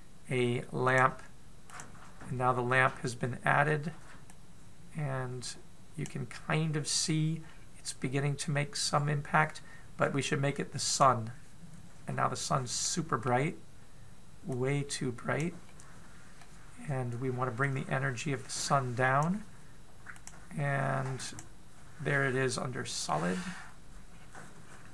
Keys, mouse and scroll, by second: 4.9 click, 4.9-6.7 scroll down 4, 6.9 middle click, 8.0-8.3 scroll up 4, 11.6 click, 13.4 middle click, 15.2 click, 16.2 middle click, 18.2 click, 21.9 click, 23.0 middle click, 23.9-24.2 scroll up 4, 24.7-24.9 scroll down 1.